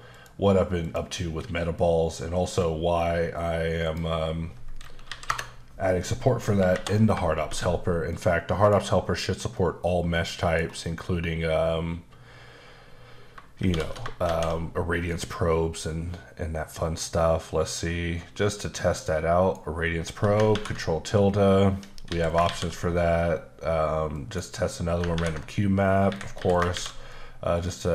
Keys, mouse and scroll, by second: 0.1 click, 0.8 click, 2.4-3.8 scroll down 4, 5.0 KP_2, 5.3 KP_Enter, 6.7 shift+Left, 7.4 shift+space, 8.1 middle click, 8.8 scroll up 2, 9.5 middle click, 13.6 shift+space, 14.2 shift+a, 18.6 click, 21.7 Escape, 22.1 x, 22.3 click, 22.4 shift+a, 24.1 click, 26.1 Escape, 26.4 x, 26.5 click, 26.7 shift+a.